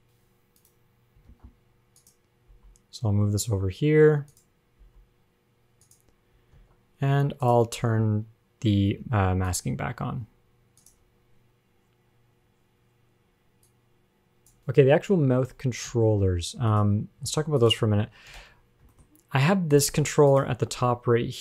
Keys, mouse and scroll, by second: 0.0 click, 0.8 click, 1.5 ctrl+Tab, 2.2 click, 2.7 g, 5.0 click, 5.0 g, 6.8 ctrl+Tab, 7.4 ctrl+Tab, 7.6 click, 9.3 ctrl+Tab, 9.7 click, 11.0 click, 13.9 click, 14.6 click, 16.1 a, 17.0 click, 17.5 ctrl+Tab, 17.8 click, 18.1 a, 18.6 alt+r, 18.6 alt+g, 19.2 shift+middle click, 19.2 scroll up 2, 19.9 click, 20.5 click, 21.0 g.